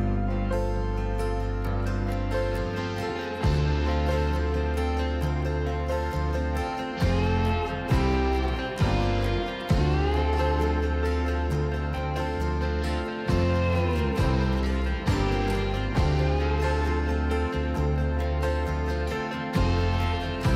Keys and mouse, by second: 2.7 s, 4.1 click, 4.4 g, 4.7 z, 5.9 click, 7.3 s, 8.3 click, 8.8 r, 9.1 z, 11.9 KP_7, 14.3-15.5 middle drag, 16.2 g, 16.4 z, 19.0 click.